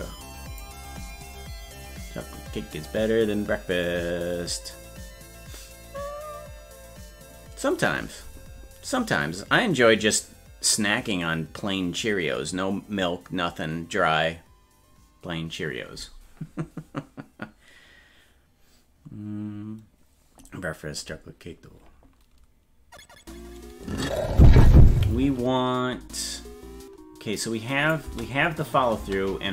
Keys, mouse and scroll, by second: 27.4 click, 28.0 space.